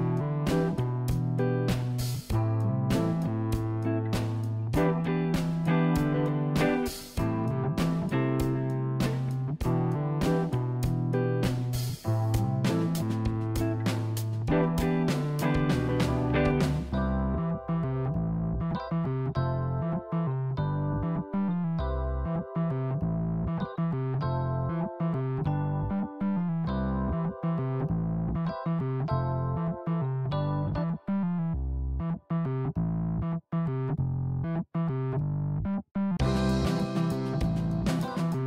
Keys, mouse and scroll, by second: 5.0 click, 5.7 click, 9.2 click, 9.7-11.3 middle drag, 14.4-16.6 scroll down 3, 16.8 KP_1, 17.6 click, 21.2 shift+d, 25.7 click, 27.2 r, 30.4 ctrl+z, 31.6 r, 33.9 ctrl+z, 36.2 r.